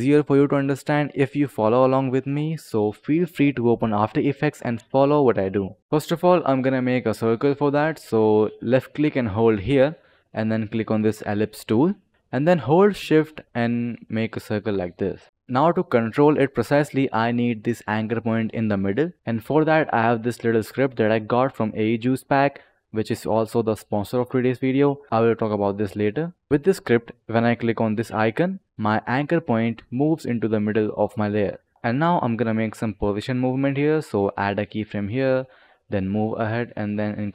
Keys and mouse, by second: 3.5 click, 4.2 click, 5.8 ctrl+x, 5.8 click, 8.7 click, 10.8 click, 13.5-14.4 shift+click, 13.6 shift+click, 19.2-24.8 drag, 28.0 click, 31.6 click, 31.7 ctrl+z, 31.7 click, 32.5 click, 34.4 click, 35.2 click, 36.8 click.